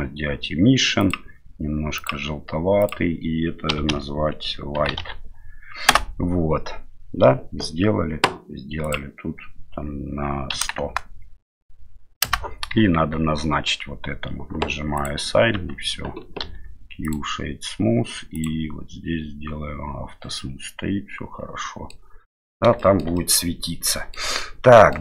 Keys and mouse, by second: 1.0 click, 2.9-6.5 drag, 8.9-12.7 drag, 10.8 KP_0, 12.9 Tab, 15.0 click, 15.5 Tab, 16.4 q, 20.4-21.9 middle drag, 22.8 shift+middle drag, 23.1-24.2 middle drag, 24.4-24.9 middle drag.